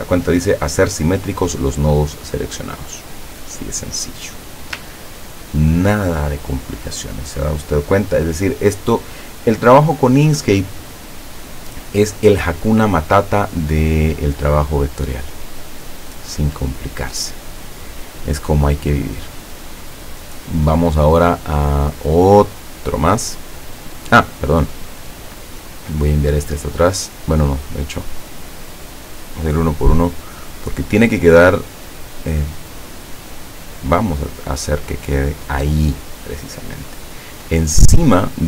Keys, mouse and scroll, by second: 5.0-5.5 ctrl+scroll down 2, 5.7 ctrl+scroll down 2, 22.6 click, 23.6-24.0 scroll down 2, 24.1 scroll up 2, 24.9 click, 27.7 click, 28.2 click, 28.7 click, 29.2 click, 29.7 click, 30.1 click, 30.6 click, 34.9 click, 36.6-37.2 scroll up 4, 37.6-38.1 scroll up 2.